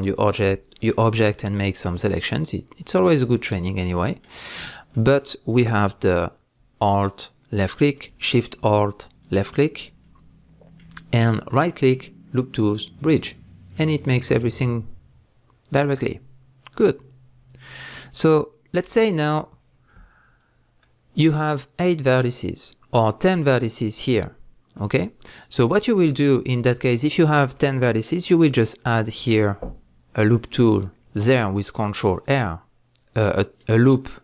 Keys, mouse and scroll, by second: 1.0 scroll down 1, 4.5-4.9 scroll up 1, 6.8 alt+click, 9.3 alt+shift+click, 10.0-11.5 middle drag, 11.5-13.8 right drag, 13.4-13.8 scroll down 1, 13.8-34.2 middle drag, 26.3 scroll up 1, 29.2 ctrl+r.